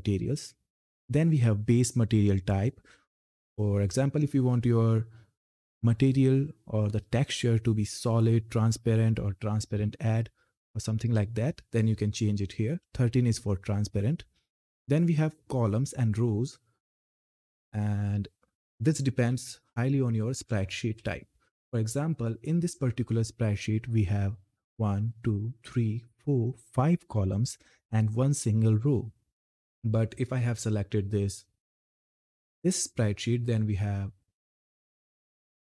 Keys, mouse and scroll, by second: 12.6 click, 17.1 click, 18.6 Up, 30.5 click, 33.1-33.8 scroll up 1, 33.8 click, 34.8 Up.